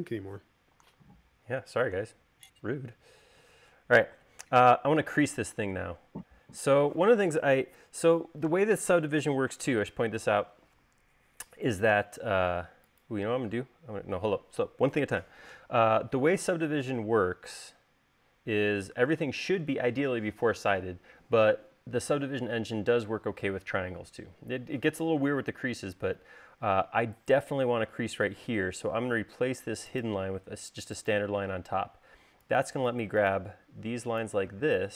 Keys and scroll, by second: 5.6 space, 26.9 l, 31.7 space.